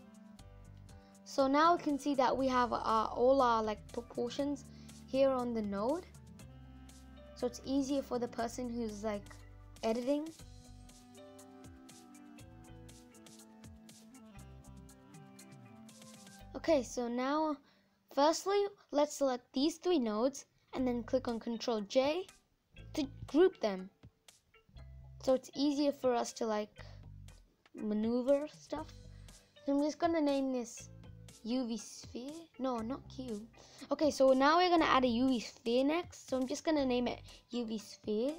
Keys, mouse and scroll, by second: 4.3-11.1 drag, 11.1 ctrl+z, 11.3 ctrl+z, 11.6 ctrl+z, 23.0 ctrl+j, 26.2 scroll down 1, 26.8 n.